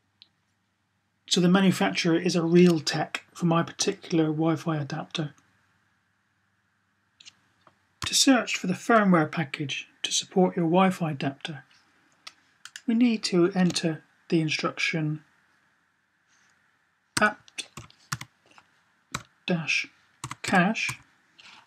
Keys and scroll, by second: 16.9-17.9 typing, 18.9 typing, 19.9-21.6 typing.